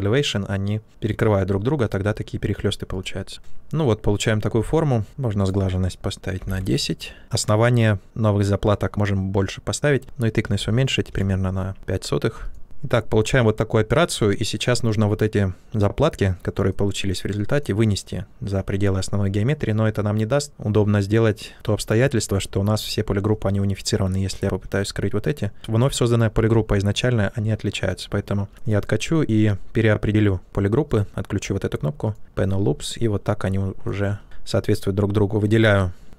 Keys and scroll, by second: 5.0 ctrl+z, 6.0-6.9 typing, 9.7-11.0 typing, 11.0 Return, 27.1 ctrl+z.